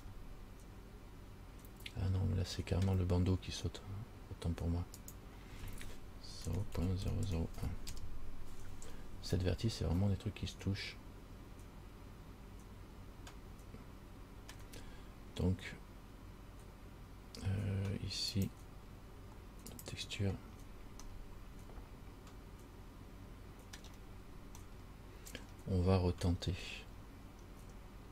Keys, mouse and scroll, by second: 0.2 middle click, 5.2 click, 7.4 KP_0, 10.2 middle click, 18.5 click, 20.0 click, 20.7 scroll down 2, 21.3 middle click, 24.2-24.8 scroll down 3, 24.9 middle click, 27.2 scroll down 2.